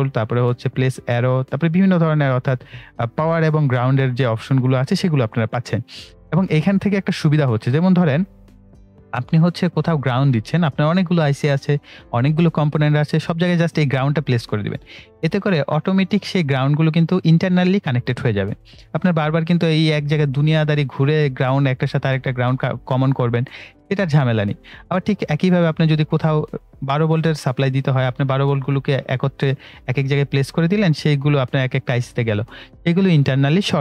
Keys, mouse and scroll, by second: 9.9 click, 13.4 click, 16.2 right click, 24.8-26.5 drag.